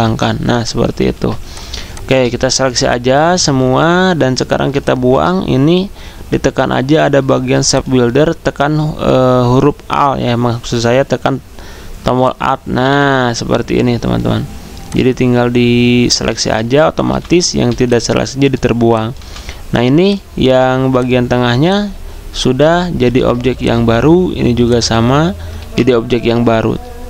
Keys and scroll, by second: 0.0 ctrl+3, 1.1 ctrl+z, 17.1-18.1 typing, 19.2 v, 23.1 ctrl+z.